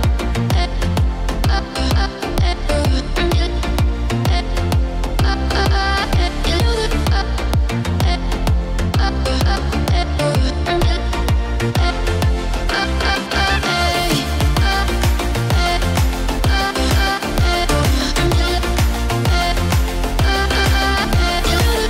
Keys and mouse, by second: 0.4-7.9 drag, 10.0-11.7 typing, 11.9 KP_Enter, 13.0-18.2 drag, 20.4-21.8 drag.